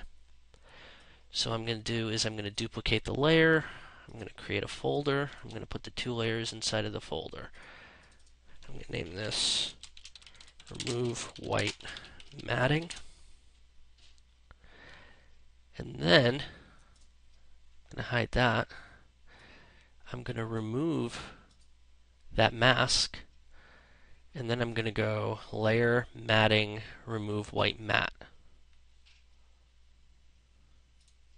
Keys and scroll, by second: 9.2 BackSpace, 12.8 Return.